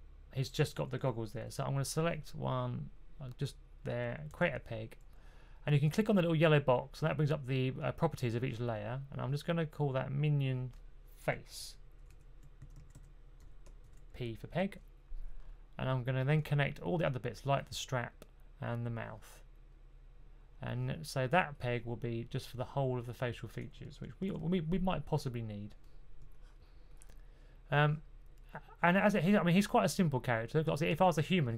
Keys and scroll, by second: 4.2 super+p, 12.3-14.2 typing, 24.1 super+z.